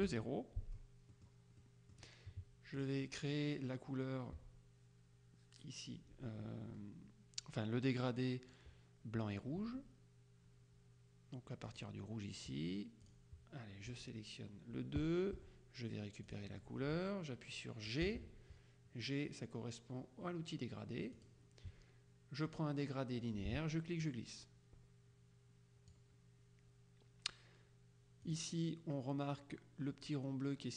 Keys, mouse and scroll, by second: 0.1 Delete, 1.2 middle click, 2.9 click, 11.8 click, 13.1 click, 15.5 F7, 16.4 click, 18.1 g, 21.3 click, 24.1-26.5 drag, 28.3 click.